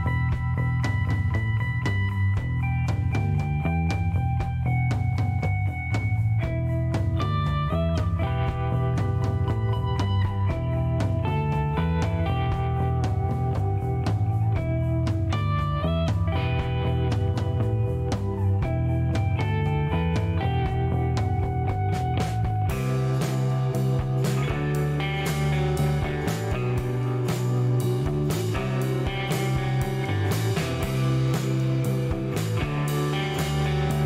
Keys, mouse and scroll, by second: 1.7 click, 2.2 click, 2.9 scroll up 1, 3.3 shift+middle click, 3.8 shift+right click, 7.2 click, 8.3 click, 9.3 click, 10.9 click, 11.6 click, 12.8 click, 14.4-14.9 scroll down 4, 15.1 middle click, 15.9 shift+right click, 18.1 click, 19.6 click, 20.4 middle click, 20.8-21.2 scroll up 2, 23.3 click, 23.9 click, 24.4 middle click, 24.8-25.2 scroll up 2, 25.5 middle click, 27.1 click, 27.3 right click, 28.6 click, 28.9 click, 29.4 space, 29.8 right click, 30.3 click, 31.3 middle click, 31.9 scroll up 1, 32.4 middle click, 32.6 scroll down 1.